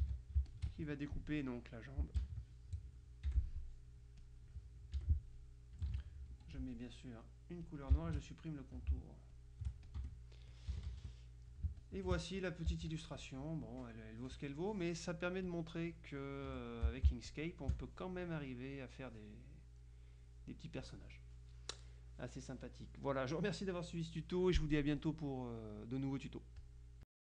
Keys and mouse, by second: 0.1 ctrl+d, 0.6 ctrl+shift+click, 2.2 ctrl+KP_Multiply, 3.2 right click, 3.4 F7, 4.4 click, 5.0 F6, 5.4 click, 6.0 ctrl+z, 6.6 ctrl+F2, 6.6 ctrl+click, 7.8 shift+click, 9.5-10.5 shift+drag, 10.1 shift+F1, 10.8 KP_Subtract, 11.9 click, 11.9 space, 13.0 click, 13.0 z, 15.6 click, 16.6 F1, 17.4-18.7 drag, 17.7 space, 26.7 click.